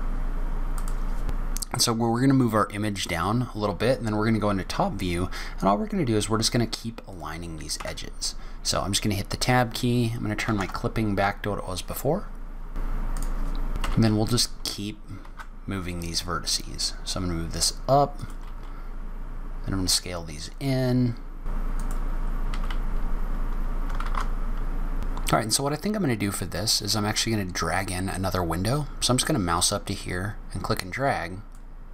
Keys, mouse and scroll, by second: 0.0 Tab, 0.0 click, 0.1 g, 0.5 scroll up 1, 0.5 middle click, 1.2 middle click, 3.1 click, 4.1 scroll down 1, 4.5 scroll up 1, 7.1 click, 7.7 Tab, 9.5 click, 12.8 click, 13.0 click, 13.5 click, 13.6 shift+click, 13.8 g, 21.5-24.9 typing, 22.0 click, 22.3 click, 22.4 shift+click, 23.0 shift+click, 24.2 click, 24.4 click, 24.8 click, 29.5 click.